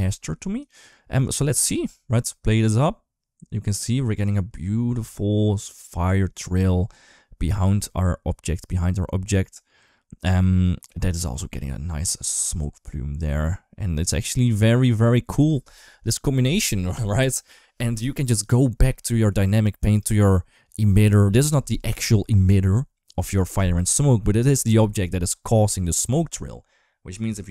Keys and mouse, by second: 0.4 click, 1.1 middle click, 1.6 space, 15.4 space, 19.7 click, 27.3 KP_7.